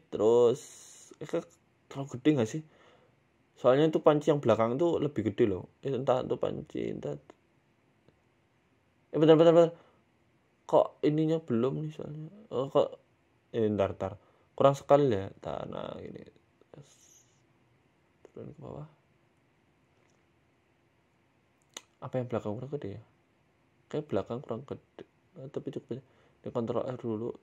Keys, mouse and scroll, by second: 0.8 middle click, 1.1 scroll down 2, 1.2 scroll up 1, 1.4 scroll down 1, 1.6 scroll up 6, 1.8 scroll down 1, 2.0-2.6 scroll up 3, 2.6 right click, 3.0 shift+right click, 3.7 s, 4.6 g, 5.5 middle click, 6.4 s, 7.1 g, 8.3 middle click, 8.8 s, 9.4 middle click, 9.7 scroll down 1, 9.8 middle click, 10.3 ctrl+z, 10.5 ctrl+z, 10.6 ctrl+z, 10.8 ctrl+z, 11.5 shift+right click, 12.5 ctrl+z, 13.0 ctrl+shift+z, 13.5 s, 14.7 ctrl+z, 15.3 ctrl+z, 15.6 ctrl+z, 16.5 shift+right click, 16.9 s, 18.2 g, 19.1 middle click, 19.6 middle click, 20.0 middle click, 20.5 a, 20.6 a, 20.8 middle click, 22.3 KP_1, 22.7 scroll down 3, 23.0-23.7 scroll up 4, 23.2 middle click, 23.7 scroll down 1, 23.8 shift+middle click, 24.2-24.5 scroll up 5, 24.8 shift+middle click, 25.2 right click, 25.4 scroll down 1, 25.4 scroll down 1, 25.7 Tab, 26.3 ctrl+r.